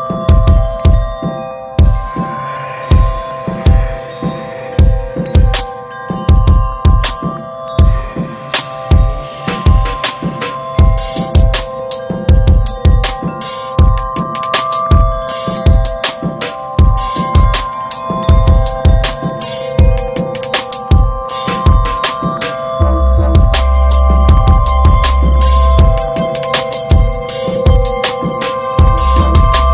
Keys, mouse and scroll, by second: 0.0-2.3 shift+middle drag, 2.3 ctrl+s, 2.6-3.3 shift+middle drag, 3.3 ctrl+s, 3.9-4.7 shift+middle drag, 4.7 scroll down 2, 5.5 click, 6.6 s, 8.8 scroll, 8.9 scroll up 1, 9.2 alt+middle click, 9.3 alt+middle click, 9.5 scroll, 9.6 scroll up 1, 11.1 t, 11.9 click, 12.4 alt+middle click, 13.2 click, 14.8 scroll up 2, 15.2-15.5 shift+middle drag, 15.5-16.0 scroll up 5, 16.0-16.9 middle drag, 16.9 ctrl+s, 18.0 drag, 24.5-27.4 drag, 29.0 click, 29.2-29.7 middle drag.